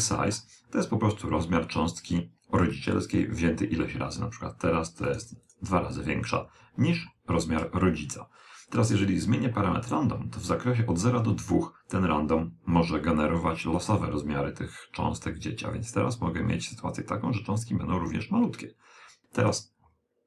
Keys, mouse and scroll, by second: 5.0 click, 14.7 click, 19.3-20.2 middle drag.